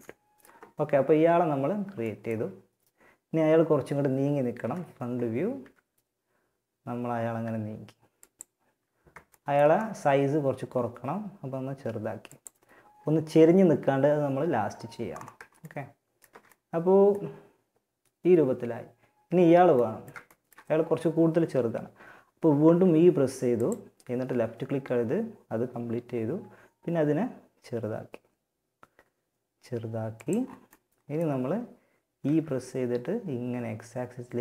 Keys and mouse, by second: 3.8 KP_1, 4.8 e, 8.6 middle click, 10.2 s, 14.8-17.5 middle drag, 19.0 middle click, 21.8 e, 25.5 s, 31.4 e.